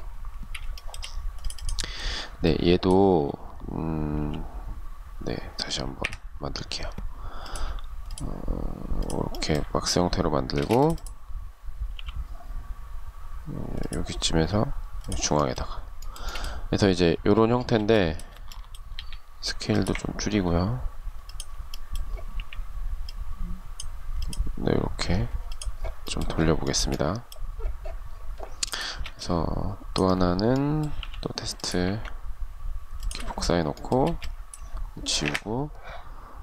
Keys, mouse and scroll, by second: 0.0 shift+middle click, 3.4 m, 5.0 Delete, 9.7 space, 11.1 m, 15.2 shift+middle click, 16.9 space, 18.2 s, 20.5 ctrl+click, 21.5 q, 25.9 shift+scroll down 1, 25.9 shift+middle click, 28.0 space, 32.2 shift+click, 33.2 space, 34.4 Delete.